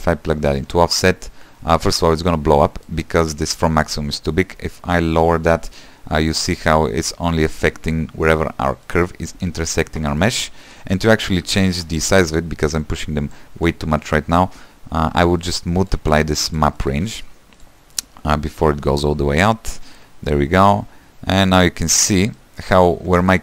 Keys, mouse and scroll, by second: 0.6 click, 4.0-6.8 shift+drag, 8.0-8.8 scroll up 1, 8.8-17.6 shift+middle drag, 17.6 q, 19.5-22.4 drag, 22.4 middle click, 22.9 scroll down 3, 23.1 shift+middle click.